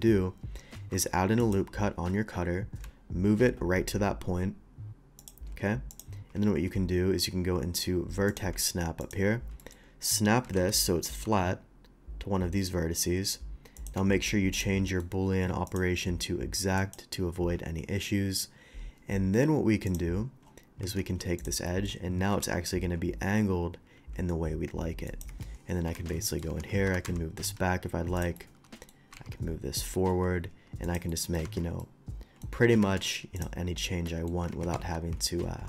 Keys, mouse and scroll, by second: 0.2 Tab, 0.5 scroll up 1, 0.7 ctrl+r, 1.4 click, 5.2 shift+click, 5.9 shift+click, 6.5 ctrl+shift+Tab, 8.3 click, 9.0 click, 9.6 middle click, 10.5 g, 10.5 z, 13.8 ctrl+click, 14.1 Tab, 14.5 click, 14.9 middle click, 15.7 click, 16.8 click, 19.9 click, 20.4 middle click, 20.9 Tab, 21.4 click, 21.7 middle click, 22.3 ctrl+b, 25.1 click, 25.9 shift+Tab, 25.9 shift+2, 26.2 middle drag, 26.8 ctrl+z, 26.8 g, 27.0 y, 27.4 x, 28.2 click, 28.4 middle click, 29.1 g, 29.8 x, 30.4 g, 30.8 click, 31.1 middle drag, 31.8-32.4 middle drag, 31.8 shift+2, 32.8 alt+v, 33.4 click, 33.7 middle click, 34.1 middle click, 34.5 ctrl+z, 34.7 ctrl+z.